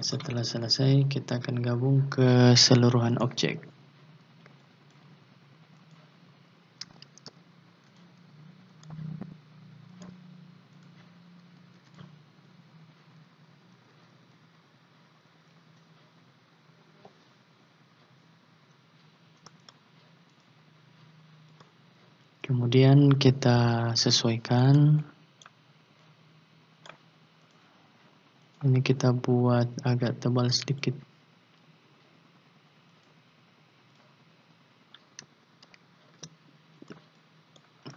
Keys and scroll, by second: 7.0 ctrl+z, 11.7 ctrl+z, 36.1 ctrl+shift+q.